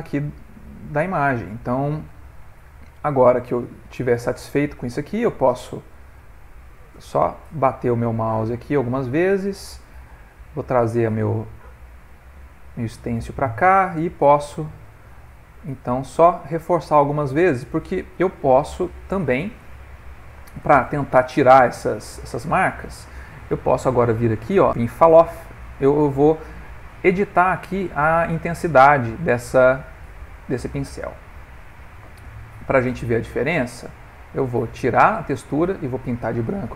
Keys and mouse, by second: 0.4 middle click, 1.8 click, 3.5 middle click, 5.0 click, 5.7 click, 6.2 click, 6.5 click, 7.0 click, 7.0 middle click, 7.5 middle click, 9.0 middle click, 10.1 right click, 11.4 middle click, 14.3 middle click, 15.1 right click, 16.5 click, 17.7 click, 18.7 middle click, 20.0 right click, 21.2 middle click, 21.9 ctrl+middle click, 23.5 middle click, 25.7 click, 26.0 middle click, 33.7 click, 35.0 middle click, 36.0 click.